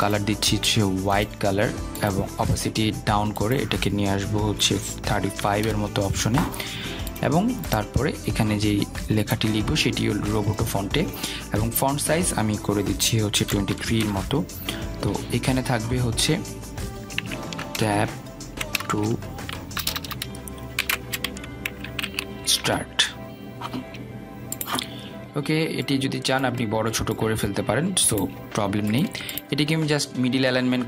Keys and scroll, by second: 6.8 Return, 15.3 Return, 21.1 BackSpace.